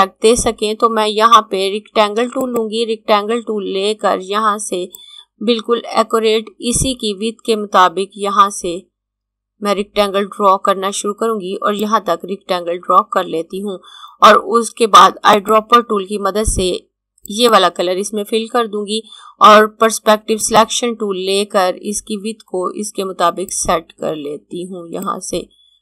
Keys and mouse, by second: 2.1 click, 4.7 click, 14.7 click, 15.4 click, 20.3 click, 23.2 click.